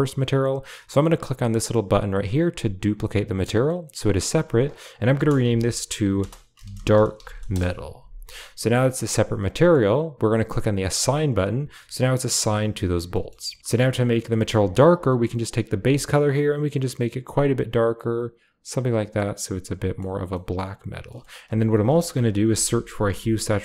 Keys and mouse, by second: 3.9-6.4 drag, 6.6 click, 8.8 click, 9.5 middle click, 12.3 Tab, 13.0 middle click, 13.3 middle click, 13.6 ctrl+x, 14.2 middle click, 15.3 click, 19.1-19.9 middle drag, 20.2 middle click, 20.9 middle click, 21.4 shift+a.